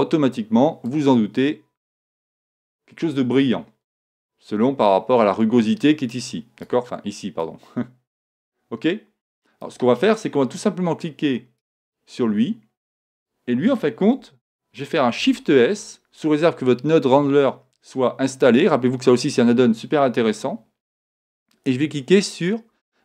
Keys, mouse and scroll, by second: 0.0-2.7 drag, 4.9-6.6 drag, 7.4 click, 8.3 middle click, 11.6-13.4 right drag, 13.1-14.9 drag, 15.2 shift+s.